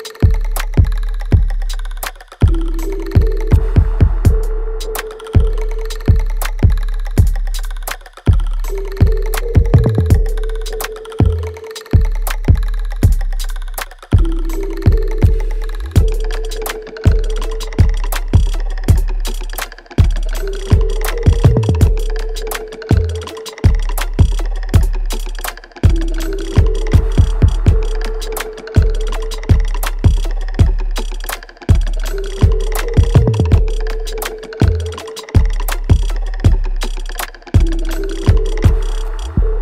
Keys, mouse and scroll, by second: 0.4-3.0 ctrl+drag, 5.4 alt+right click, 6.7 ctrl+click, 7.8 right click, 9.0 click, 9.0-11.9 alt+drag, 11.9 alt+right click, 12.4-14.1 alt+drag, 14.1 ctrl+z, 15.5 alt+click, 16.7 ctrl+z, 18.1 click, 19.2-24.7 drag, 24.7 alt+right click, 25.0-27.1 alt+drag, 27.1-29.6 ctrl+drag, 29.6 alt+click, 30.8 right click, 31.4 click, 31.7 alt+right click, 32.4-34.6 alt+drag, 34.6 ctrl+s, 35.2-38.4 alt+drag, 38.4 alt+right click, 39.1-39.6 alt+drag.